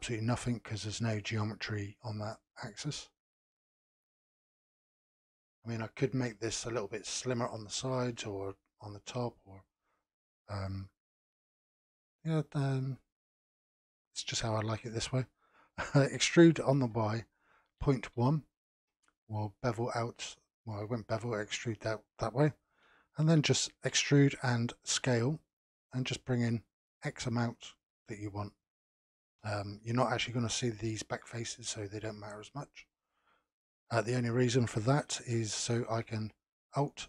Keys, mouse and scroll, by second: 4.3-7.3 middle drag, 8.9-13.9 middle drag, 16.2 e, 20.2-23.9 middle drag, 23.9 e, 26.3-31.4 middle drag, 31.6-34.6 middle drag, 35.1-36.7 shift+middle drag, 36.7 alt+click.